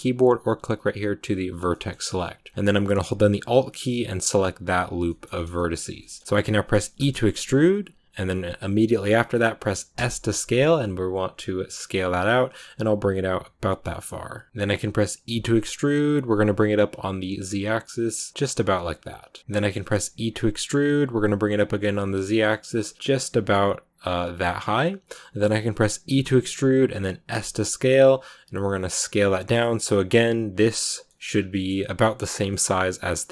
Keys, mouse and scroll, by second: 1.6 shift+middle click, 1.8 scroll up 2, 3.3 scroll up 3, 3.3 alt+right click, 4.3 scroll down 2, 4.9 shift+middle click, 5.2-5.9 scroll up 4, 5.4 shift+middle click, 5.9-6.9 shift+middle drag, 6.9 e, 14.5 click, 15.1 e, 31.2 scroll down 2, 31.4-32.6 middle drag, 32.6-33.3 scroll up 2.